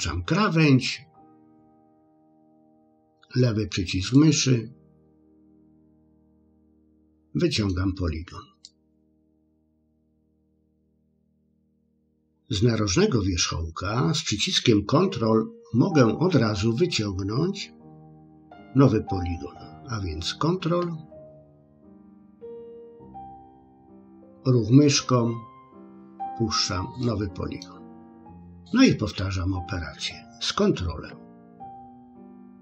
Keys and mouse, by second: 4.2-6.0 drag, 6.6-7.7 middle drag, 8.6 click, 9.7 click, 23.5-25.5 drag, 27.0 middle click, 32.5 click.